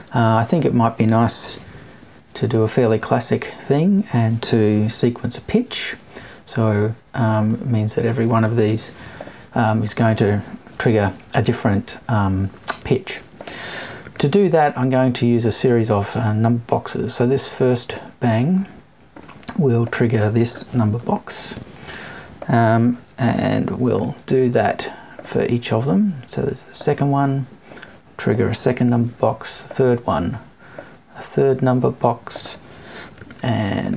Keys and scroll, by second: 1.5 Left, 2.4 Up, 3.0 Right, 3.9 alt+Right, 4.7 alt+Left, 6.0 Right, 7.5 Left, 8.6 Right, 20.9 Right.